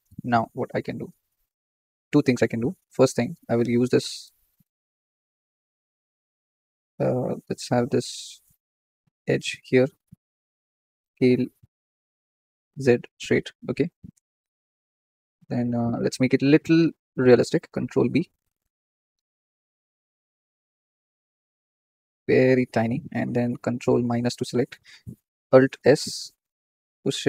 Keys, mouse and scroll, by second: 0.1-0.6 shift+middle drag, 0.6 scroll up 2, 3.4 click, 3.9 Tab, 4.2 scroll up 2, 4.4 shift+middle click, 4.8 scroll up 2, 5.8 click, 7.6 click, 8.4 click, 9.3 alt+shift+click, 10.4 s, 14.6-15.0 scroll up 2, 15.0 shift+middle click, 15.4-17.1 scroll up 11, 15.7 shift+middle click, 17.1 shift+middle click, 17.8 ctrl+b, 21.6 shift+middle click, 21.8-22.3 scroll up 9, 22.3-23.9 shift+middle drag, 23.9 ctrl+KP_Subtract, 25.6 alt+s.